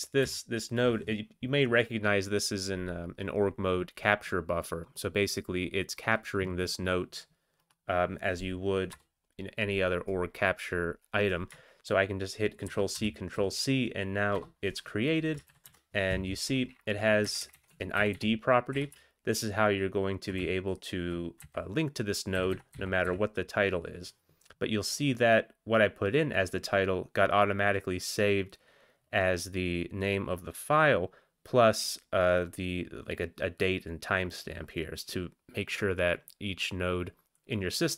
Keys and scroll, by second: 0.2 End, 0.9 Down, 8.9 Return, 12.6 ctrl+c, 12.9 ctrl+c, 14.3 Return, 15.5 ctrl+x, 15.6 ctrl+s, 17.2 Up, 17.4 Up, 17.7 Up, 17.7 Tab, 17.9 Down, 18.1 Down, 18.7 Up, 18.9 Right, 19.4 Right, 19.6-20.2 Right, 20.3 Right, 20.3 shift+Tab, 20.5-21.9 typing, 22.3 Down, 22.5 Down, 22.9 Down, 23.2 Up.